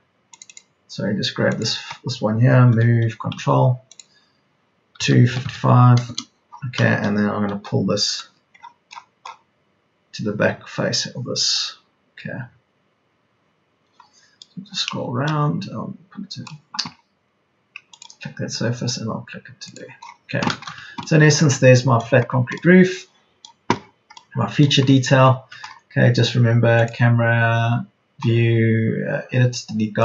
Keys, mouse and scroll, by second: 2.6 m, 4.9 KP_2, 5.2 KP_5, 7.4 p, 16.8 p, 20.2 Escape, 22.2 Escape, 25.8 Escape.